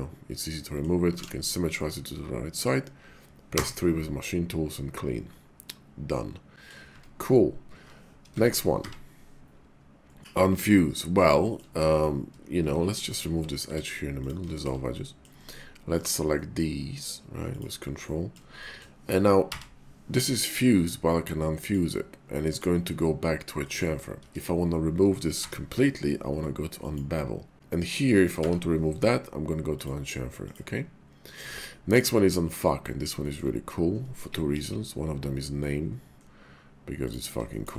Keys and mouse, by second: 1.1 alt+x, 1.7 middle click, 3.4 3, 5.6-6.7 middle drag, 6.9 Tab, 8.3 Tab, 8.8 y, 10.8 click, 11.3 shift+click, 11.7 click, 12.6 Tab, 13.6 x, 14.6 shift+middle click, 15.0 middle click, 15.4 Tab, 15.9 click, 16.3 middle click, 17.5 ctrl+click, 18.0 middle click, 18.6 shift+middle click, 19.4 y, 23.0 middle click, 24.2 ctrl+z, 25.3 y, 27.5 Tab, 27.7 middle click, 28.3 y, 31.4 Tab, 31.9 click, 32.4 shift+middle click, 32.8 middle click, 33.2 shift+middle click, 34.5 ctrl+b, 37.1 click, 37.5 shift+click.